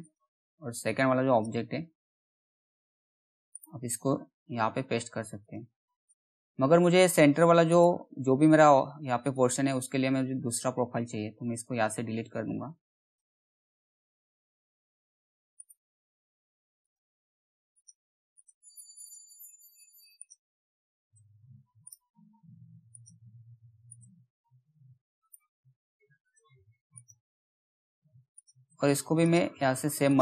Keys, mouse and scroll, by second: 3.0 right click, 4.9 click, 5.0 click, 6.4-7.2 scroll up 2, 7.2 click, 8.7 right click, 10.5 click, 15.1 right click, 16.4 click, 21.3 right click, 22.4 click, 24.7 right click, 25.8 click, 29.6 click.